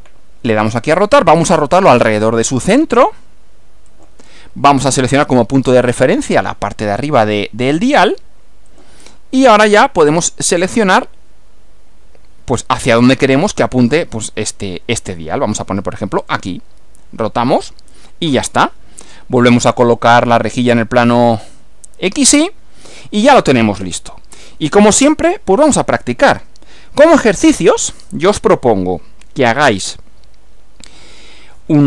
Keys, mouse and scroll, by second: 0.6 click, 3.9 click, 5.6-6.3 scroll up 2, 8.7 click, 16.2 click, 17.4-17.8 scroll down 2, 18.3 scroll down 2, 19.5 click, 21.4 click, 27.3 click.